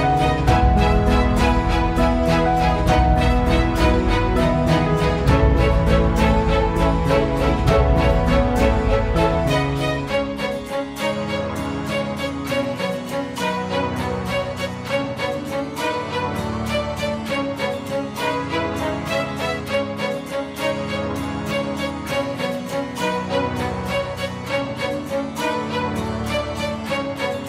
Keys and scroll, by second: 1.7 Escape.